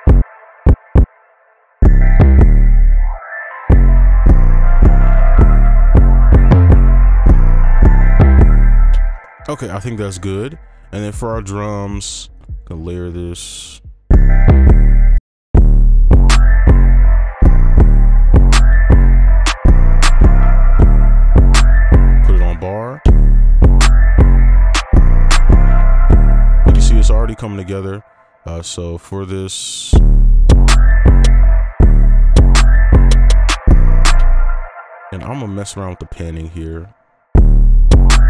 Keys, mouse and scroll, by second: 0.9 double click, 1.1 ctrl+click, 1.6 ctrl+Up, 1.6 right click, 1.8 right click, 8.9 space, 9.2 ctrl+right click, 12.5 double click, 14.7 space, 15.2 double click, 17.5 space, 17.7 space, 20.4 space, 20.8 space, 21.7-22.2 scroll down 1, 22.5 space, 25.8 space, 26.7 space, 29.9 space, 31.5 space, 31.7 space, 34.1 space, 37.3 space.